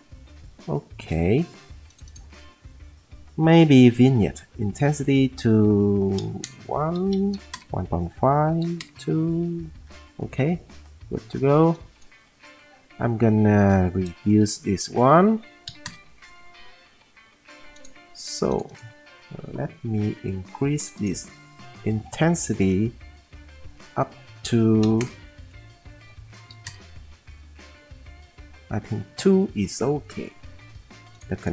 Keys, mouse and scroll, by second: 6.4 Return, 6.4-7.3 typing, 8.4-9.1 typing, 14.4 -, 15.6 1, 15.8-17.3 drag, 24.8 typing, 26.0 scroll, 26.5 typing, 28.4 scroll.